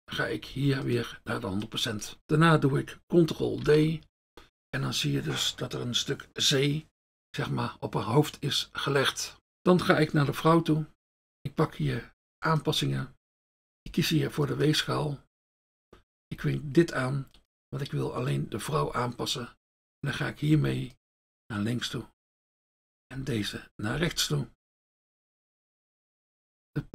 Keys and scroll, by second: 3.7 ctrl+d, 11.4 F1, 13.4 F1, 18.8 F1.